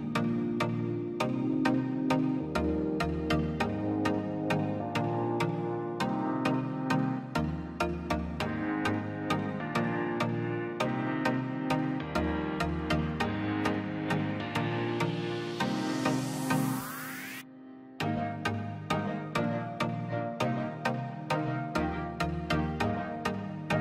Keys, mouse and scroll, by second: 0.0 click, 0.8-1.2 scroll up 1, 1.2 click, 1.4 scroll down 1, 1.7 middle click, 2.0-2.4 scroll up 1, 2.5 click, 2.6 scroll down 1, 3.4 click, 3.6 scroll up 1, 3.9 click, 5.1-5.4 scroll down 1, 6.0 click, 6.9-7.3 scroll up 1, 7.3 click, 7.5-8.2 scroll down 1, 8.4 click, 8.7 scroll down 1, 9.6 scroll up 1, 9.6 click, 9.7-10.1 scroll down 1, 12.5 scroll down 1, 13.5-13.9 scroll up 1, 13.9 Escape, 14.0 space, 14.7 click, 15.4-16.3 scroll down 1, 16.8 scroll up 1, 17.4 click, 18.8 scroll down 1, 19.3 middle click, 20.0 scroll up 1, 20.5 click, 22.6 click.